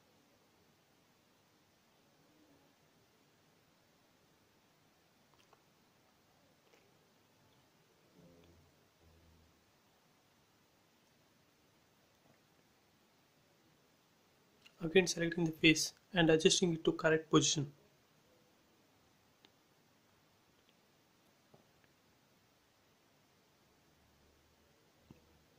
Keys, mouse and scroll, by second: 0.0 scroll up 1, 0.5 scroll down 1, 1.0 middle click, 2.1 click, 2.2 click, 3.0 middle click, 3.6 scroll down 1, 4.1 middle click, 5.2 m, 5.3 click, 6.5 Left, 7.5-9.0 typing, 8.6 Return, 9.4 scroll up 1, 9.9 middle click, 10.8 scroll up 1, 11.1 middle click, 11.5 scroll up 1, 12.5-13.9 middle drag, 13.9 click, 14.3 scroll up 1, 15.1 click, 15.6 scroll up 1, 16.1 shift+click, 18.3 shift+m, 18.5 shift+click, 20.2 shift+Left, 23.9 shift+Num_Lock, 23.9 shift+scroll down 1, 24.6 shift+space.